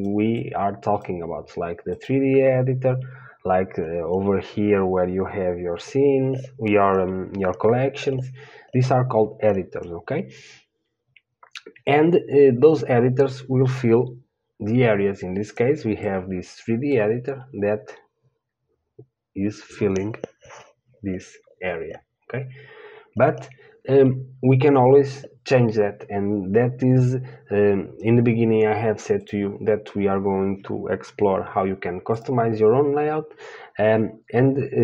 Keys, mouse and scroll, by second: 1.3-34.8 drag.